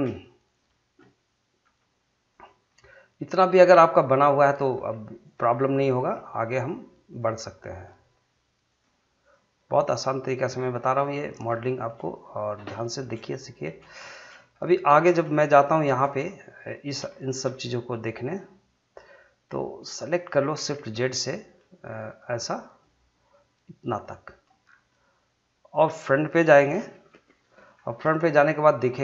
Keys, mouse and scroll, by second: 0.4 click, 1.6 g, 2.3 click, 2.7-4.6 middle drag, 4.6 click, 4.7 g, 5.2 click, 6.0 g, 6.5 click, 7.2 g, 7.7 click, 8.8 g, 9.2 click, 9.8 g, 10.2 click, 10.5 scroll down 1, 10.8-12.7 middle drag, 12.7-13.8 shift+middle drag, 13.8 shift+scroll up 2, 14.0 shift+middle click, 15.2 scroll up 1, 15.4 shift+middle click, 16.1-20.8 middle drag, 20.8 shift+z, 21.5 middle click, 22.8-24.6 drag, 24.6 scroll down 1, 24.9 middle click, 27.8-28.3 scroll up 1, 28.5 shift+middle click.